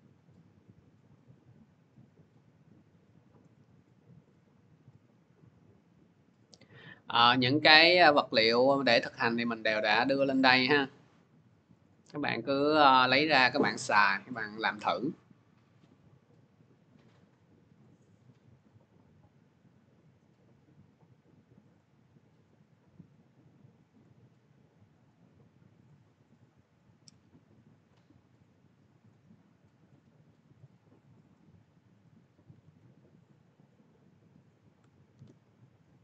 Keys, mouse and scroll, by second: 5.7 click, 6.6 click, 8.5 click, 8.7 click, 10.4 click, 10.6 click, 11.7 click, 12.4 click, 14.0 click, 15.7 click, 16.8 click, 17.6 click, 18.3 click, 18.4 click, 19.6 click, 19.7 click, 21.6 click, 23.8 click, 24.9 click, 25.6 click, 27.7 click, 28.9 click, 29.3-29.9 scroll, 30.5 click, 31.0 Delete, 31.4 scroll, 32.0 click, 32.5 ctrl+x, 32.9 middle click, 33.2 click, 33.4 click, 33.9 click, 34.1 click, 35.0 ctrl+v, 35.8 click.